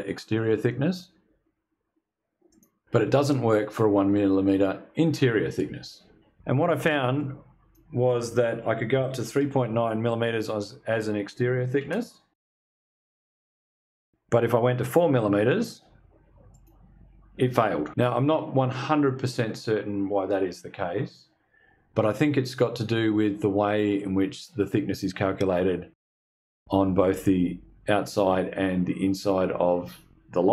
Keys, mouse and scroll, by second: 1.9 click, 6.6 click, 8.2-9.4 typing, 11.3 Tab, 14.3 click, 16.0 click.